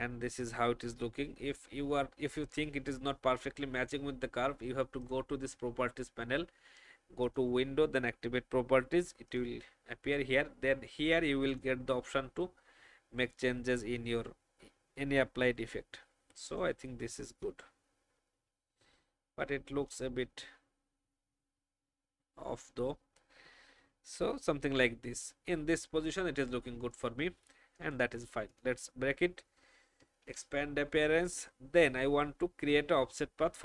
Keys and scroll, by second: 17.6 shift+Down, 23.6 Up, 23.7 Up, 24.1 Up, 30.2 ctrl+2, 32.5 ctrl+alt+f.